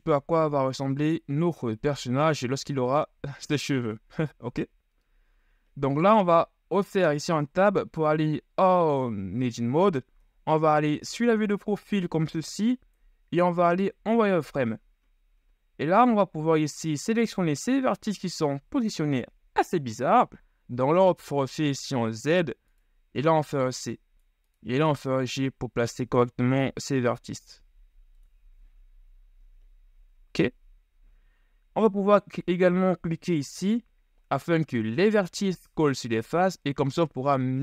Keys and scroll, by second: 1.6 KP_1, 3.0 z, 10.4 KP_3, 14.1 z, 21.0 z, 25.1 g, 28.7 z.